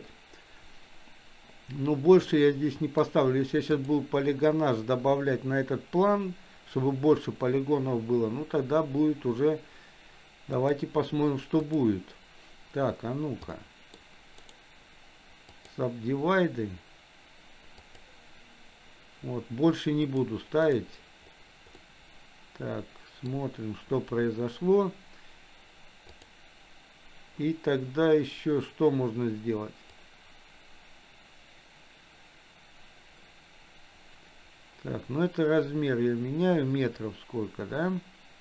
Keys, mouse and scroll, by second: 2.5 scroll up 1, 2.6 middle click, 4.0 click, 10.6-11.9 drag, 13.6 middle click, 14.4-15.9 right drag, 17.8 click, 20.1-21.1 drag, 22.0-24.2 middle drag, 26.2 click, 30.4-38.4 drag.